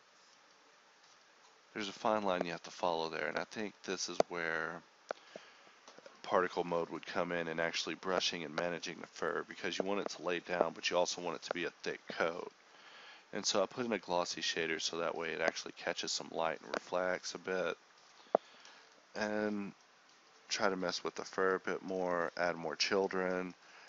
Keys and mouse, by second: 0.3-2.7 drag, 3.2 KP_0, 8.7 click, 9.5 KP_0, 12.5 ctrl+s, 17.7 click, 19.1 KP_0.